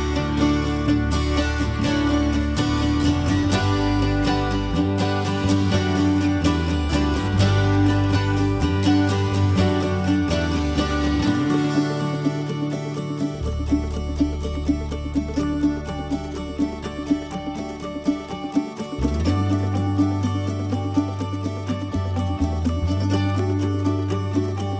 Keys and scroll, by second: 1.7 e, 3.6-5.1 typing, 21.1 Escape, 21.8 Escape, 23.0 m.